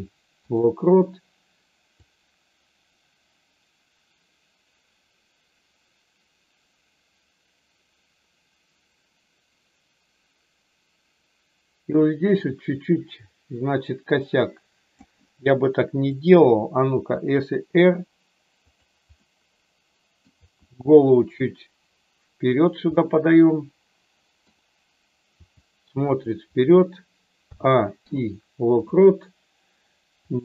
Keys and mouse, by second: 1.9-15.0 drag, 16.1 click, 16.9 r, 18.7 click, 19.2-20.2 middle drag, 20.3 r, 22.8-24.4 middle drag, 25.4 r, 26.1 click, 27.4 a, 27.9 i, 30.2 click.